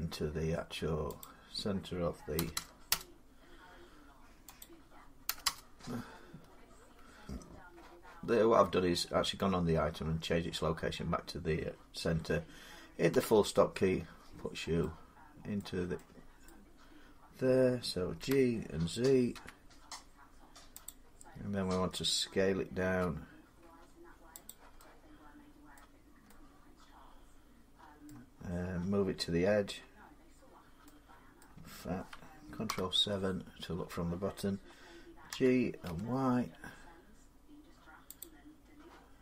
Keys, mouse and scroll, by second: 0.0 middle click, 1.0 click, 2.2 0, 2.7 Return, 4.4 click, 5.1 0, 9.5 Return, 12.9 scroll, 14.2 middle click, 14.2 middle click, 14.4 middle click, 14.7 scroll, 15.4 middle click, 16.3 middle click, 18.0 g, 18.3-19.2 scroll up 4, 19.2 z, 20.7 click, 22.7 s, 24.3 click, 25.6 middle click, 27.9 middle click, 31.2 middle click, 32.5 ctrl+7, 35.1-35.7 typing, 37.0 middle click, 38.0-39.2 drag.